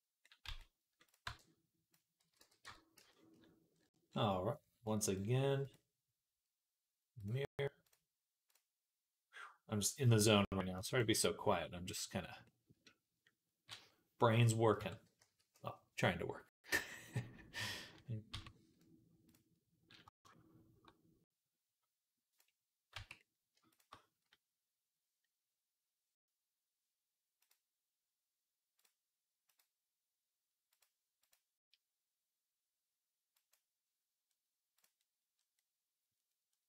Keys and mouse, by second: 0.1-10.9 drag, 0.3 z, 1.1 b, 2.1 x, 2.5 Tab, 2.8 z, 4.7-12.0 middle drag, 4.7-12.0 right drag, 12.3 middle click, 12.3 right click, 14.6 Tab, 15.0 a, 18.1 q, 22.8 Tab, 23.1 shift+click, 23.1-34.2 shift+right drag, 33.2 click, 35.4 right click, 35.7 right click, 36.4 right click.